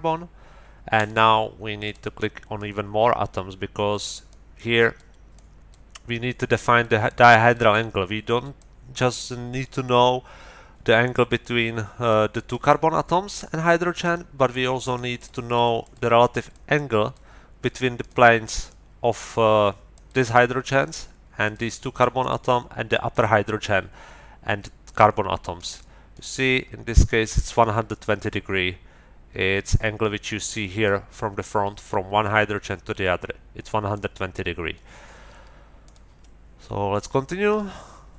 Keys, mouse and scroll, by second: 0.9 middle click, 1.8 middle click, 2.6-4.1 middle drag, 4.3 middle click, 5.3 middle click, 8.6-9.8 middle drag, 12.1 middle click, 14.0 middle click, 14.4 middle click, 14.4 click, 14.8 middle click, 14.8 click, 15.2 click, 15.8 middle click, 15.8 click, 16.5 click, 17.3 middle click, 18.0 middle click, 19.2 middle click, 19.9 middle click, 20.8 middle click, 21.4 middle click, 21.9 middle click, 23.1 middle click, 25.6 middle click, 27.0 middle click, 27.8-31.0 middle drag, 33.9-34.9 middle drag, 35.8 middle click, 37.5 middle click.